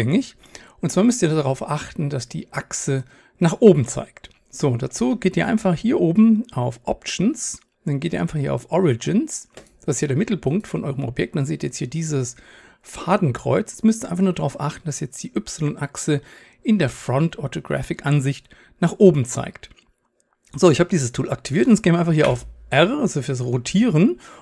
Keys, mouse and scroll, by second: 8.9-24.4 drag, 22.3 r.